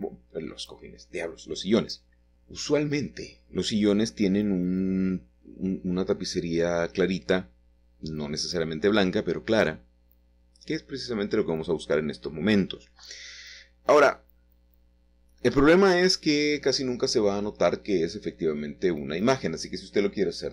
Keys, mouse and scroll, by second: 2.9 click, 3.9-5.1 scroll down 1, 4.8 shift+middle click, 5.9 middle click, 6.9 click, 11.0 click, 11.6 click, 11.7 click, 12.2-13.7 drag, 14.5 click, 16.5-19.4 scroll down 4, 19.4-20.4 scroll down 1.